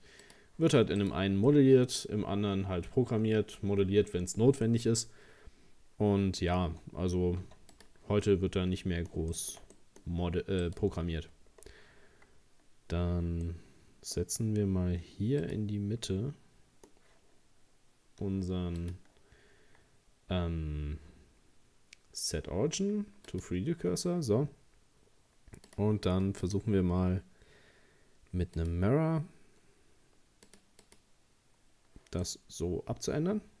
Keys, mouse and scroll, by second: 1.0 right click, 1.5-4.5 middle drag, 4.6-7.4 middle drag, 7.4 x, 8.3-10.6 middle drag, 10.6 right click, 11.5-13.5 scroll down 1, 13.5-15.4 middle drag, 15.4 click, 16.1-18.8 middle drag, 18.8-29.5 drag, 30.5-32.2 drag, 32.2-33.6 middle drag.